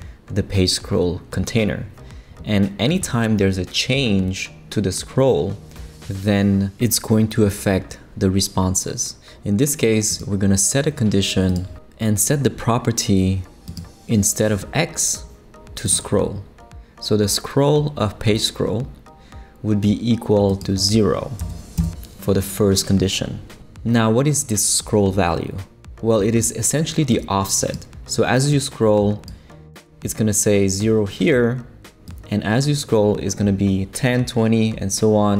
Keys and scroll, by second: 21.4 0, 21.8 Return.